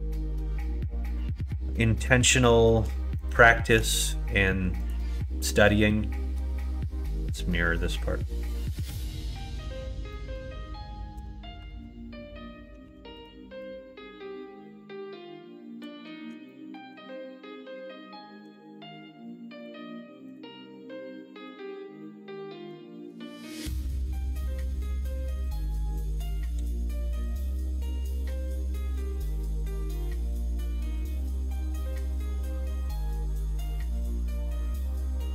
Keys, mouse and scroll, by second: 0.1 middle click, 1.1 middle click, 2.2 2, 3.1 click, 5.4 middle click, 10.1 middle click, 11.1 KP_7, 11.6 alt+z, 12.8 3, 13.1 click, 13.6-15.8 drag, 16.4 shift+middle click, 18.4 x, 20.3-21.4 drag, 22.7 click, 24.0 click, 24.2 middle click, 24.8 middle click, 25.5 middle click, 25.8 middle click, 26.6 middle click, 26.9 alt+z, 27.6 middle click, 28.2 middle click, 28.5 middle click, 29.0 shift+middle click.